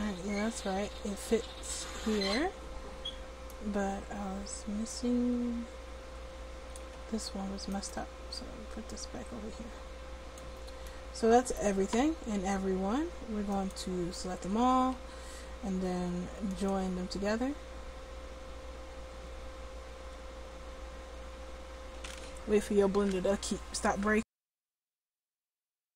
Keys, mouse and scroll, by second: 5.0-6.8 drag, 7.8-10.7 drag, 9.0 right click, 10.9 middle click, 13.6 click, 14.5 a, 15.0 a.